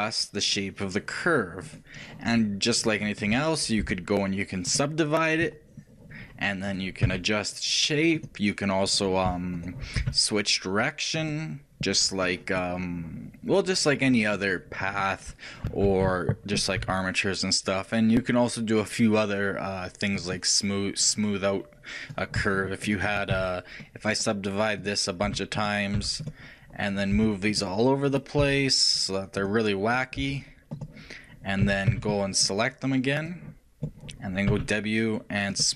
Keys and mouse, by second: 4.1 click, 4.1 shift+w, 9.6-13.0 shift+drag, 10.3 w, 16.2 ctrl+z, 17.1 w, 22.4-26.2 shift+right drag, 23.7 shift+w, 27.4-32.0 right drag, 27.4 g, 32.0 a, 32.2 b.